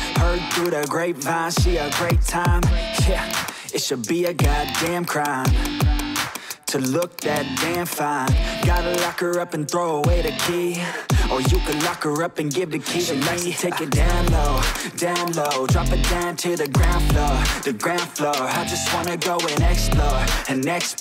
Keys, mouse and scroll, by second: 0.7 click, 2.2 click, 3.5 click, 4.4 click, 4.8 click, 5.3 click, 5.7 click, 5.9 click, 6.3 click, 6.6 click, 7.0 click, 7.3 click, 7.8 click, 8.8-10.3 typing, 8.9 click, 10.4 click, 11.6 click, 12.1 ctrl+c, 12.4 ctrl+d, 13.5 click, 13.7-14.1 typing, 14.7 click, 15.4 click, 15.7 ctrl+c, 16.0 ctrl+d, 16.8 click, 17.2-17.9 typing, 18.4 click, 19.2 click, 19.6-20.6 scroll.